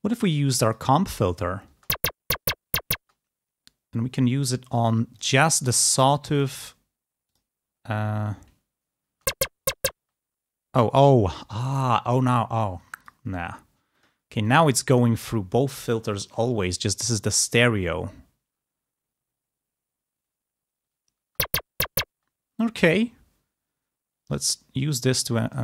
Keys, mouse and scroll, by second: 0.6 click, 1.6 space, 2.9 space, 5.1 click, 5.4 click, 6.4 click, 7.2 click, 9.0 space, 9.9 space, 12.9 click, 13.9 click, 14.3 click, 21.1 space, 22.0 space, 24.2 click, 25.0 click.